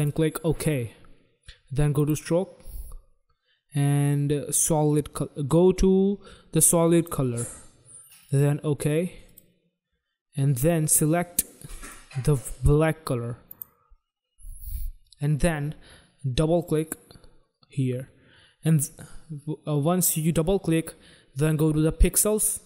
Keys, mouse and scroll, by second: 1.8 click, 6.9 click, 8.1 click, 8.3 click, 9.2 click, 10.6 click, 13.4 click, 16.5 click, 16.6 click, 22.4 click.